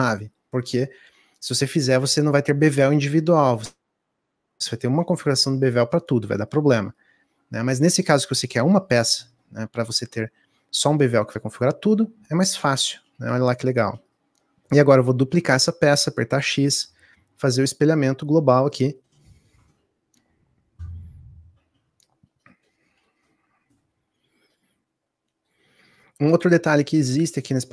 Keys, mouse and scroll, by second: 0.5 click, 13.3 shift+d, 23.2-27.7 middle drag.